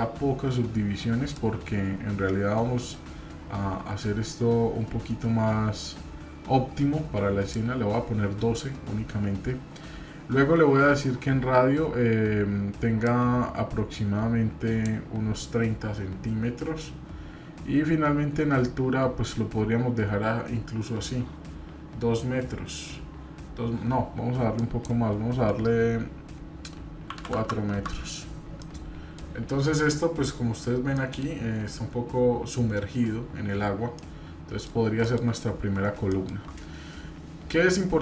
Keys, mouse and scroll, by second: 28.6-29.2 middle drag, 31.0 middle click, 31.0 scroll up 2, 34.0-34.6 middle drag, 36.8 scroll up 3, 37.7-38.0 middle drag.